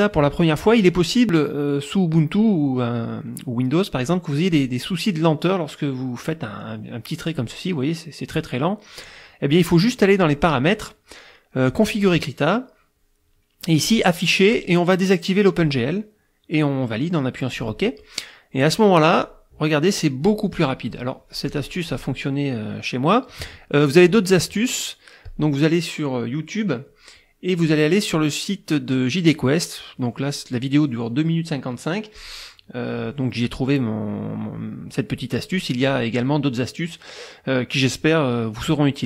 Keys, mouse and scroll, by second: 4.7-7.6 drag, 10.2 click, 11.7 click, 13.8 click, 15.6 click, 17.5 click, 19.2-20.5 drag, 20.6-22.2 drag, 25.3 click, 26.9 click, 32.2-33.2 drag.